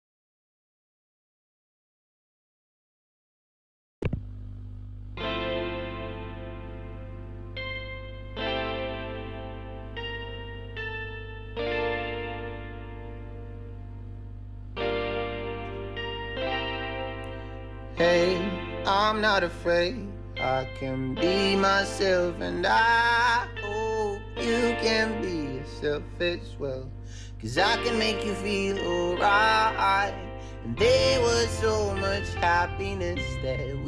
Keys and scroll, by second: 20.3-21.4 typing, 21.8 Up, 22.5 Return.